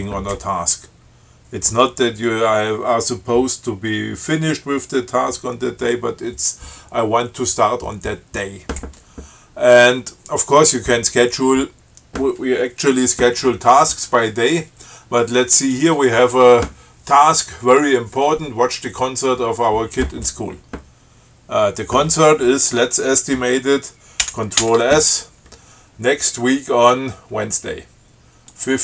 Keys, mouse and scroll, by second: 15.9 click, 24.4 ctrl+c, 24.8 ctrl+s, 28.7 click.